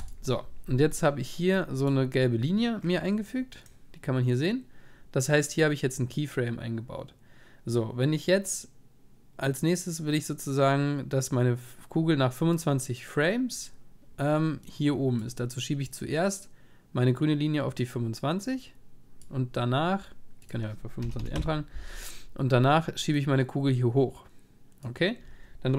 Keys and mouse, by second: 2.8 click, 15.2-17.6 drag, 22.4-24.5 middle drag, 24.5 click.